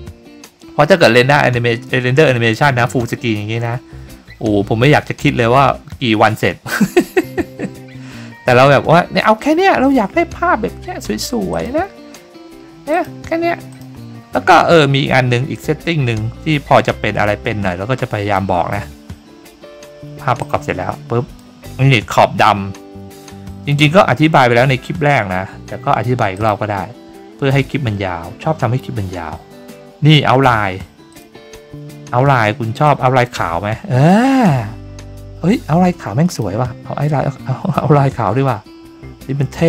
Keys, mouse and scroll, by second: 11.5 click, 12.9 click, 13.7 click, 15.5-18.3 drag, 18.7-20.0 scroll up 5, 20.4-21.3 drag, 26.3 click, 31.1 click, 32.8-36.4 drag.